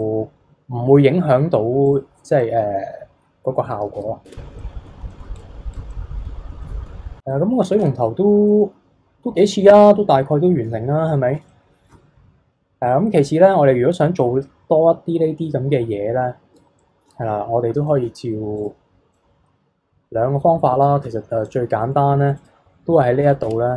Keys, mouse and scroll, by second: 0.0 click, 1.9-2.4 drag, 2.4 middle click, 3.0-3.9 scroll down 3, 3.9 KP_3, 4.3 Tab, 4.6-4.9 middle drag, 4.9 scroll down 1, 5.1 middle drag, 5.4 click, 5.7 click, 5.9-6.4 middle drag, 6.4 scroll up 1, 6.6-7.8 middle drag, 7.8 KP_3, 8.2 scroll down 1, 8.5-10.0 middle drag, 10.0-11.1 scroll up 4, 11.1-11.4 scroll down 2, 11.4 shift+middle click, 12.1-14.0 scroll up 3, 16.8 shift+middle drag, 17.2-17.9 scroll down 4, 17.9 shift+middle click, 18.5 click, 19.1 middle click, 19.3-20.3 middle drag, 20.3-20.8 scroll up 4, 20.8-21.4 shift+middle drag, 21.4 click, 21.8-22.3 middle drag, 22.3 click, 23.4 Tab.